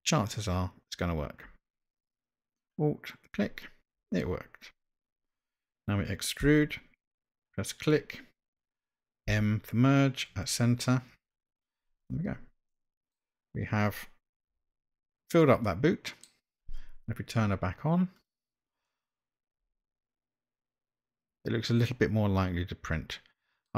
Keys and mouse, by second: 3.2 alt+click, 6.7 e, 9.3 m, 12.0 click, 12.7 middle click, 14.7 Tab, 15.7-16.2 middle drag, 18.2 click, 18.9-23.7 middle drag.